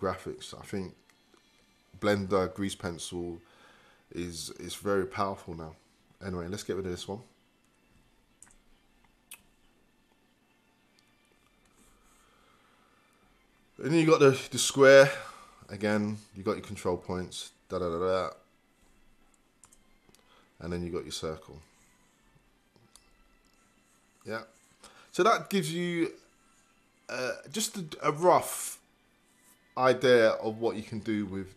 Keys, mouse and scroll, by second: 8.5 Return, 19.7 Return, 21.7 click.